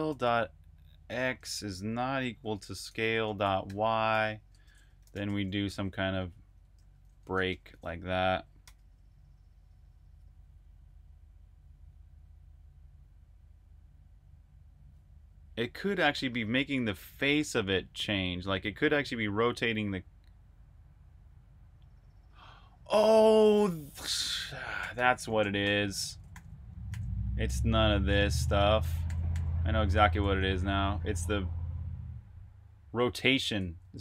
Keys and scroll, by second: 0.0-4.5 typing, 6.8-9.6 typing, 8.5 super+b, 23.9-25.7 typing, 26.1 super+j, 26.7 super+j, 28.0-28.9 typing, 28.9 super+j, 29.2 super+j, 29.8 super+k, 32.8-34.0 typing.